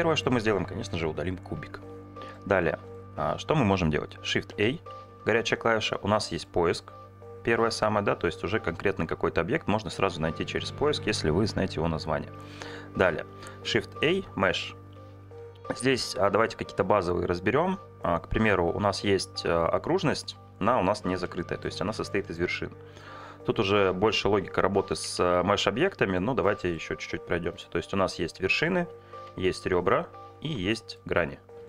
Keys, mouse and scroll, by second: 1.5 Delete, 2.0 middle click, 4.5 shift+a, 13.0 shift+a, 21.8 Tab, 23.0 click, 24.8 e, 25.1 z, 26.1 click, 26.5 middle click, 27.1 2, 27.6 alt+click, 28.3 1, 28.6 alt+click, 29.1 2, 29.5 alt+click, 30.5 3, 30.7 click.